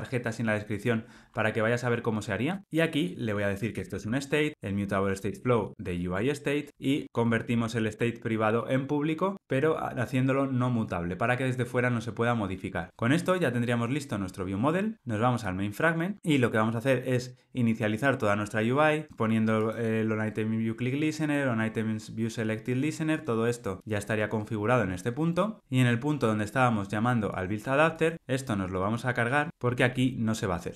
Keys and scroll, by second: 2.6 Return, 6.1 Tab, 7.8 alt+Return.